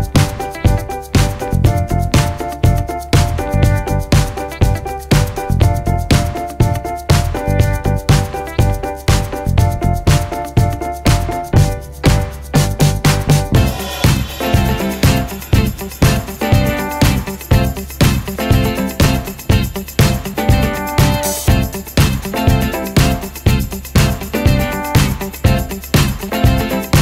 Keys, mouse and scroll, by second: 1.6-2.5 scroll down 1, 2.9 click, 4.5 scroll up 1, 5.9 click, 7.2-7.6 scroll down 1, 7.8 ctrl+space, 8.2 shift+click, 8.3 c, 10.0 ctrl+z, 10.7 click, 11.1 scroll down 1, 11.5 click, 11.9 ctrl+z, 13.3 scroll up 1, 14.0 ctrl+shift+z, 15.6 scroll down 1, 16.0 click, 18.6-19.2 scroll up 1, 19.2 click, 20.3-25.1 typing, 26.0 click.